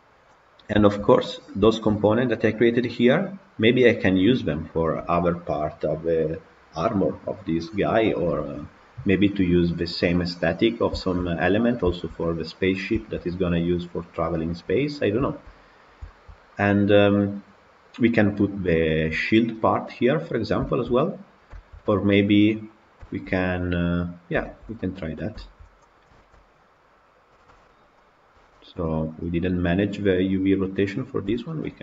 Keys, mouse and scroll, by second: 0.0-0.7 scroll down 3, 0.7-1.2 shift+middle drag, 1.2-1.6 scroll down 3, 1.6-3.0 shift+middle drag, 3.0-3.4 scroll up 1, 3.4 scroll down 1, 3.7-10.6 middle drag, 10.6 scroll up 1, 10.9-12.6 shift+middle drag, 12.6-12.9 scroll up 1, 12.9-14.8 shift+middle drag, 14.8-15.1 scroll up 1, 15.1-15.8 shift+middle drag, 15.8 scroll up 1, 15.9-20.3 shift+middle drag, 20.3 scroll down 3, 20.5-22.7 shift+middle drag, 22.7-23.0 scroll up 2, 23.0-24.2 shift+middle drag, 24.2 scroll down 1, 24.3-24.9 shift+middle drag, 24.9 scroll up 2, 25.3-25.9 shift+middle drag, 25.9 click, 26.3 Tab, 28.0 click, 28.5 shift+click, 28.9 shift+click, 29.2 shift+click, 29.7 shift+click, 30.3 shift+click, 30.9 shift+click, 31.4-31.8 middle drag.